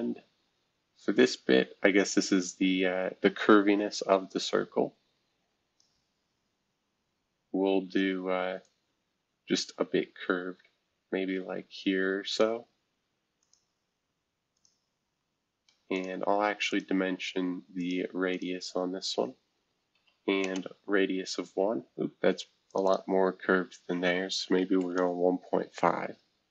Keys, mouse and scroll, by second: 6.2 scroll down 2, 6.7-8.6 scroll up 3, 8.6-12.4 drag, 13.4 click, 14.5 shift+click, 15.9 click, 16.7 click, 17.8 click, 18.3 click, 19.9-20.4 typing, 22.7 click, 22.8 click, 24.3-25.3 typing.